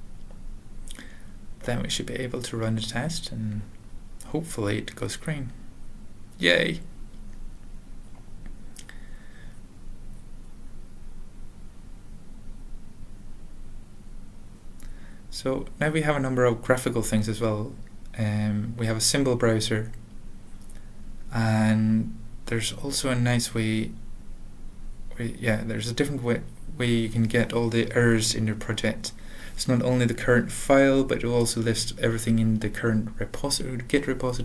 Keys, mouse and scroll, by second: 0.6 ctrl+n, 0.6 ctrl+p, 6.9 click, 7.1 alt+v, 10.7 click, 12.4 ctrl+p, 12.8 ctrl+l, 14.2 alt+x, 14.8-16.5 typing, 16.8 Return, 18.5 click, 19.0 alt+x, 19.8-21.8 typing, 23.2 ctrl+n, 23.6 ctrl+n, 24.2 Return, 27.0 click, 28.3 ctrl+e, 28.9 Return, 28.9 typing, 29.2 ctrl+a, 29.2 ctrl+s, 33.3 click, 33.8 Tab.